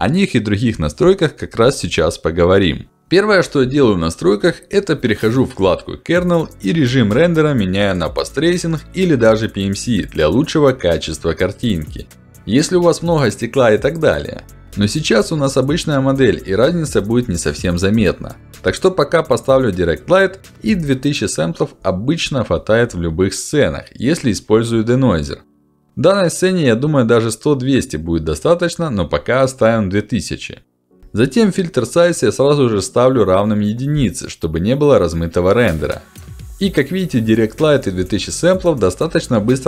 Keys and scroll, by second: 19.4 2, 19.9 0, 21.2 Return.